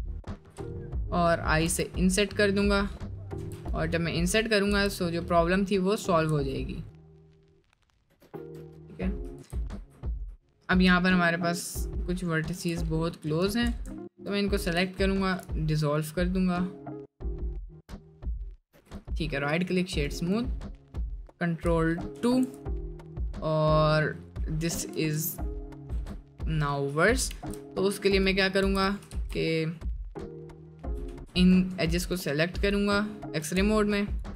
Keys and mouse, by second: 0.6 middle click, 1.2 middle click, 1.6 i, 3.4 Tab, 3.8 middle click, 4.3 middle click, 4.7 Tab, 5.2 middle click, 6.3 Tab, 6.5 middle click, 7.0-7.9 middle drag, 8.2 ctrl+z, 8.6 middle click, 10.2 ctrl+z, 10.5 middle click, 10.9 middle click, 11.5 middle click, 12.6 1, 13.4 2, 15.2 ctrl+x, 15.9 middle click, 16.6 middle click, 17.7 middle click, 18.7 Tab, 20.8 middle drag, 22.3 ctrl+2, 22.8-23.7 middle drag, 24.0 middle drag, 24.7 middle drag, 25.9 Tab, 27.3 ctrl+r, 29.3 ctrl+z, 30.8 1, 31.1 2, 33.4 typing, 34.1 ctrl+click.